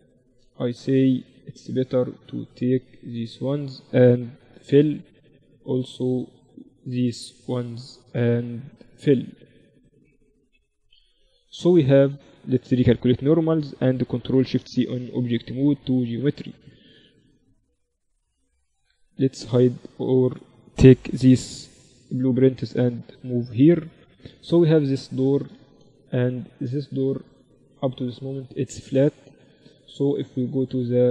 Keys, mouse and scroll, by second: 0.8-5.2 right drag, 4.6 f, 5.2-7.2 middle drag, 7.2-10.8 drag, 7.2-11.9 right drag, 10.8 f, 11.2 z, 11.7 Tab, 12.4 Tab, 12.5 a, 12.8 a, 13.6 ctrl+n, 13.8 Tab, 14.9 ctrl+alt+shift+c, 17.1 KP_Divide, 18.3 z, 19.2-21.2 drag, 21.3 m, 24.2-26.2 right drag, 24.6-26.0 drag, 24.6-31.1 middle drag.